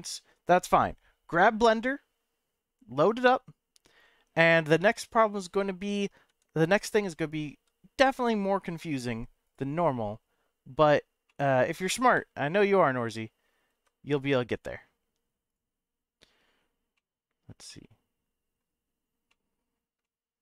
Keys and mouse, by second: 4.8 m, 6.3 n, 9.4 click, 11.3 middle drag, 12.1 KP_Decimal, 15.5 click, 16.9-17.5 middle drag, 17.7-18.6 shift+middle drag, 19.3-19.7 middle drag, 20.0-20.3 shift+middle drag.